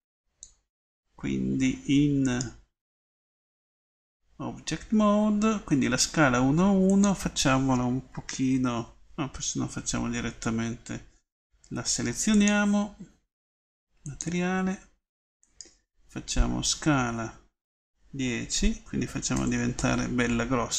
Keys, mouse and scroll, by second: 3.3 Tab, 16.8 s.